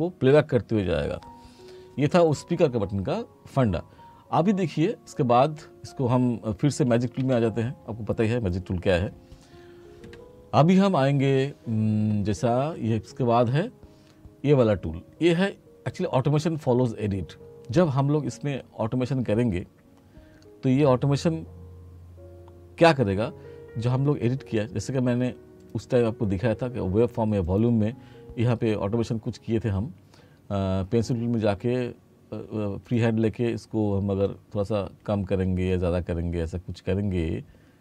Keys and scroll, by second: 7.2 F7.